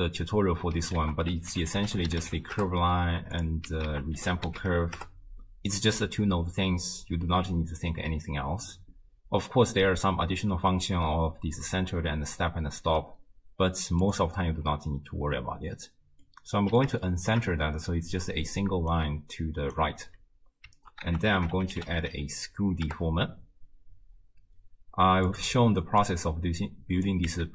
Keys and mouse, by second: 1.0 ctrl+a, 3.9 ctrl+a, 14.1 click, 16.3-16.8 middle drag, 17.1-17.4 shift+middle drag, 18.6 d, 18.9 click, 19.8 d, 19.9 d, 20.2 d, 21.1 ctrl+a, 26.0-27.1 drag, 27.3 x.